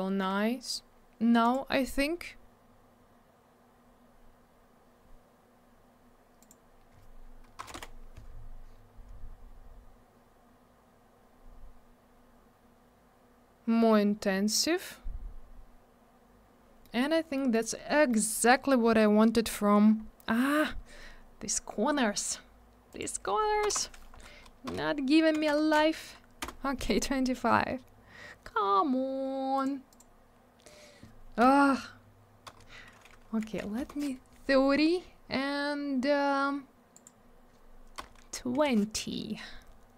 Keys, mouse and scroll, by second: 1.4 click, 1.5 click, 1.9-2.5 scroll up 1, 2.5 scroll down 1, 6.4 click, 6.4 click, 7.6 BackSpace, 7.7 3, 7.7 Return, 9.8-10.2 scroll up 1, 11.5-12.7 scroll down 1, 14.3 scroll up 1, 15.4-15.7 scroll down 1, 16.8 middle click, 17.0 middle click, 17.1 scroll down 1, 17.4 middle click, 17.5 middle click, 17.7 scroll up 1, 18.1 middle click, 18.2 middle click, 18.9-19.3 scroll up 1, 19.9 scroll down 1, 22.9 click, 22.9 click, 23.6 BackSpace, 24.1 Right, 24.6 BackSpace, 25.3 2, 26.4 Return, 29.5 click, 29.6 click, 29.9 click, 29.9 double click, 31.4 BackSpace, 33.4 3, 33.7 Return, 36.9 click, 37.0 click, 37.9 BackSpace, 38.5 2, 38.6 Return.